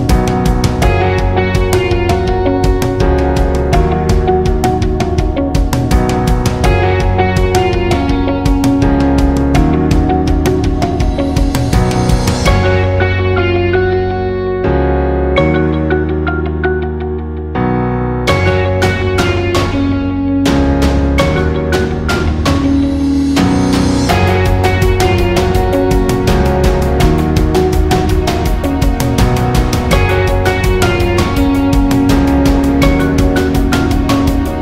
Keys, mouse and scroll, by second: 6.5 KP_9, 6.9 Return, 7.9 click, 8.4 KP_7, 8.6 Return, 10.1-12.4 drag, 16.2 KP_9, 16.6 Return, 17.2 click, 17.8 shift+click, 21.6 shift+click, 22.8 z, 23.1 click, 30.4 Escape, 33.6 click.